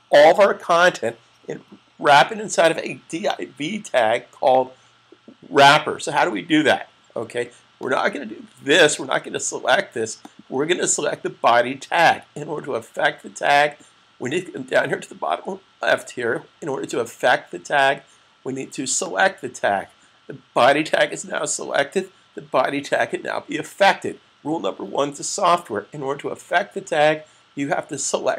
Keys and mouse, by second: 7.6 click, 18.9 click.